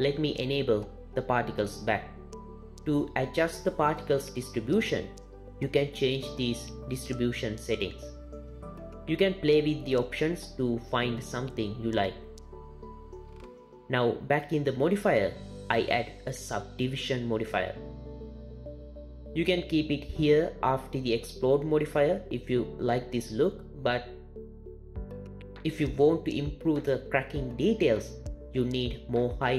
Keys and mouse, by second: 0.5-1.5 drag, 2.4 click, 6.7 click, 9.4-9.8 drag, 10.3 click, 11.6 click, 12.5 drag, 12.8 click, 15.2-17.6 drag.